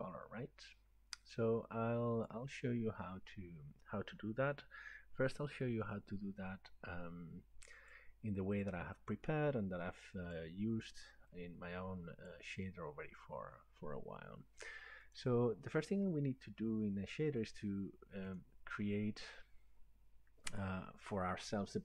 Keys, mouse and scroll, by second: 2.3 click, 5.9 click, 7.9 click, 10.3 click, 12.4 click, 15.2 click, 17.5 right click, 18.4 click.